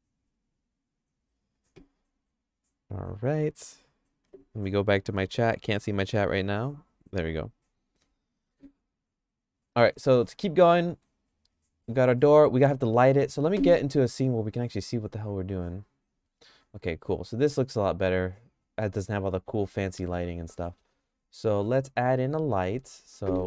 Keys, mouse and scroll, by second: 9.7 middle click, 10.1 middle click, 10.4-13.1 shift+middle drag, 14.4 click, 15.9 click, 16.3 middle click, 16.7-20.2 shift+middle drag, 20.6 middle click, 21.0-22.8 shift+middle drag, 23.3 shift+a.